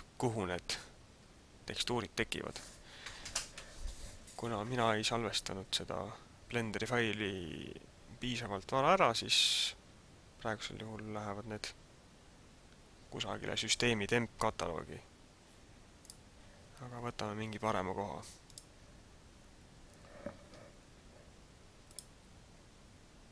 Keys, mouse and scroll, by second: 15.9 click.